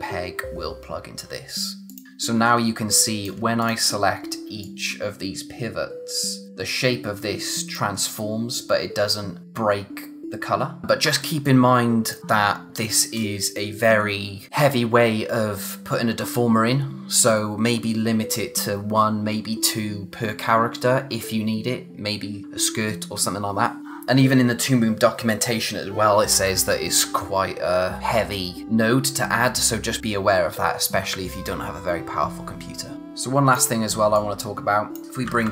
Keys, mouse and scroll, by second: 1.9 click, 2.6 space, 3.0 click, 3.1 space, 3.6 click, 10.8 z, 12.0 click, 23.8 click, 32.9 click, 33.0 space, 34.1 click, 34.5 space, 35.0 click, 35.2 a.